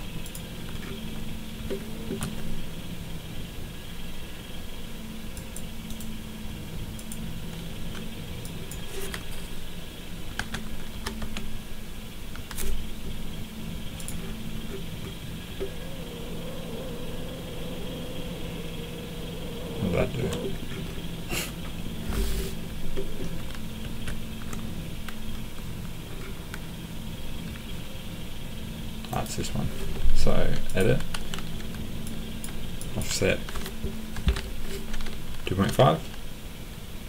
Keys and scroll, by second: 10.4-11.2 typing, 23.8 ctrl+z, 33.9-35.6 typing.